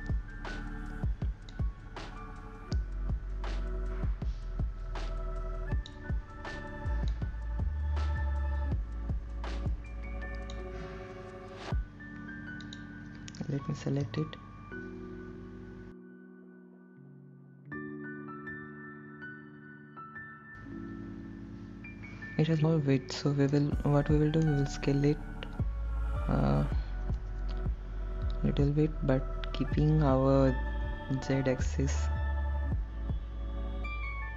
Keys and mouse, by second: 1.2-2.8 drag, 4.4-8.7 drag, 10.1-13.5 drag, 16.9 ctrl+l, 19.3-20.6 middle drag, 26.5 middle click, 30.2 s.